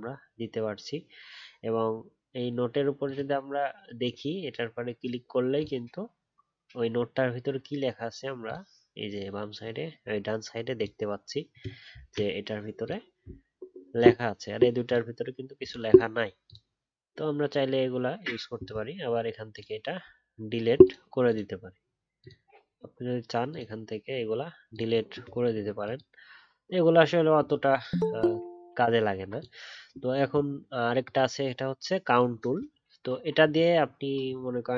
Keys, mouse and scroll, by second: 11.9 ctrl+z.